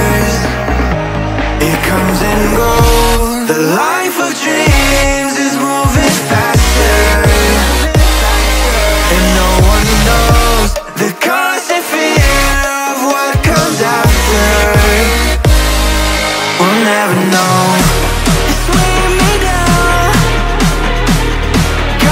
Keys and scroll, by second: 0.0-3.1 typing, 8.7 Caps_Lock.